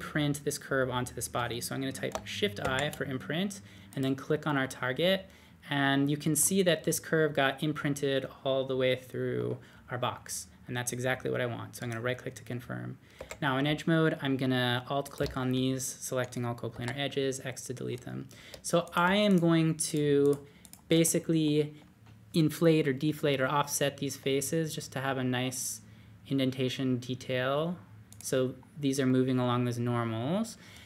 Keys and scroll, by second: 2.6 shift+i, 13.1 2, 16.7 x, 24.2 d.